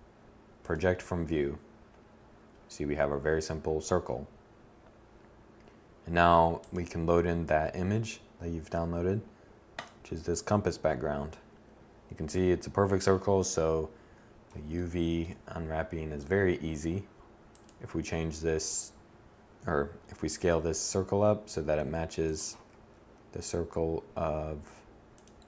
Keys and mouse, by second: 19.5 click, 19.5 s, 21.8 g, 24.3 click.